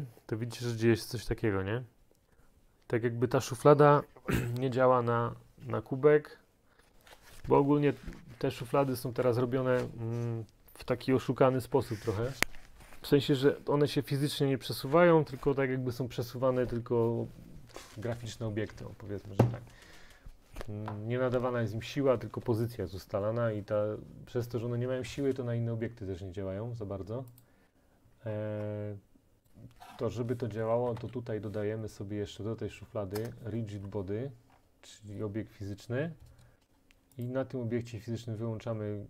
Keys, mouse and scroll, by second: 27.5-28.5 click, 28.3-29.5 scroll, 29.5 click, 30.8 typing, 33.2 Return, 34.5-36.0 scroll, 37.3 click.